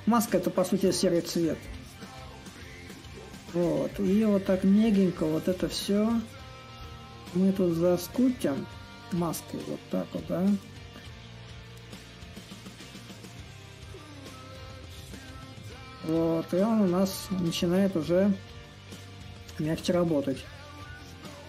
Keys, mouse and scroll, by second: 0.0-5.0 ctrl+drag, 5.3-10.3 ctrl+drag, 11.5-12.5 drag, 12.6-16.5 drag, 17.3 ctrl+z, 17.7-21.4 drag.